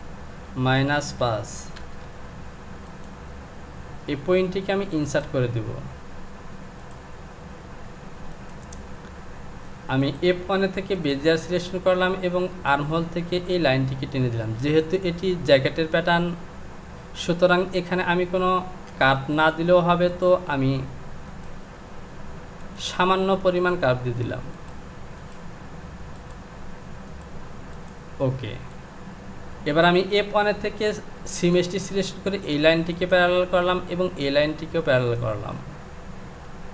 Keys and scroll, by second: 36.5 Home.